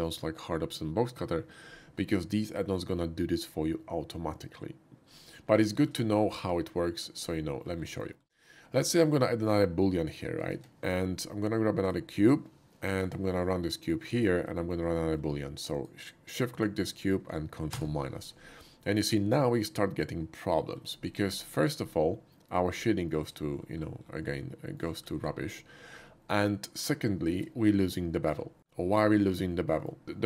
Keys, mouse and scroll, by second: 5.7 shift+middle click, 6.1-7.0 shift+middle drag, 7.5 shift+right click, 7.8 shift+middle drag, 8.4-8.9 shift+middle drag, 9.1 shift+middle click, 9.4 shift+middle drag, 10.5 shift+a, 11.8 click, 12.9 g, 14.0 click, 14.6 shift+middle drag, 15.0 shift+middle click, 15.7 shift+click, 16.5 shift+click, 17.7 ctrl+KP_Subtract, 19.8 middle click, 21.1 middle click, 22.1 shift+middle click, 23.0 shift+middle click, 23.8 shift+middle click, 24.3-24.8 shift+middle drag, 25.2 shift+middle click, 26.3-26.9 middle drag, 27.3 shift+middle click, 28.6-29.9 shift+middle drag.